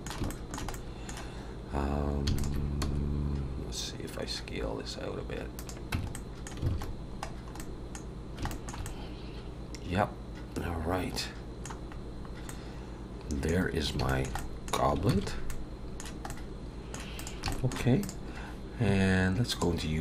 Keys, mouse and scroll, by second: 0.0 click, 0.0 scroll up 2, 0.2 shift+middle click, 0.7 middle click, 2.3 alt+shift+click, 2.9 s, 5.9 Tab, 6.1 middle click, 6.7 alt+a, 6.8-7.4 scroll down 5, 7.5 middle click, 8.1-8.4 scroll down 1, 8.5 shift+middle click, 8.8 middle click, 12.0-12.4 scroll up 2, 12.4 middle click, 13.5-13.9 scroll down 3, 14.0 shift+middle click, 14.3 middle click, 15.8 ctrl+s, 15.8 middle click, 16.3 middle click, 17.1 click, 17.5 shift+middle click, 18.0 click.